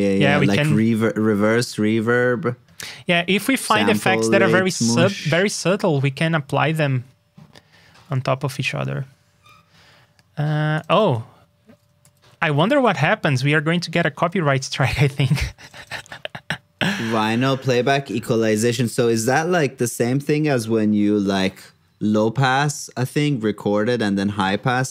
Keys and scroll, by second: 0.7 super+Tab, 12.0 super+c, 12.8 super+Tab, 15.9 super+v, 18.2 super+c, 19.2 super+v.